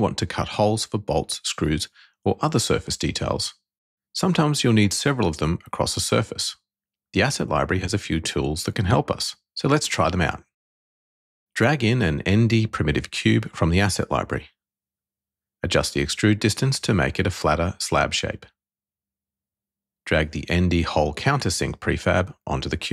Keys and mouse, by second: 10.5 click, 12.2 n, 13.2-14.3 drag, 16.1 click, 17.3-19.4 drag, 21.3 click.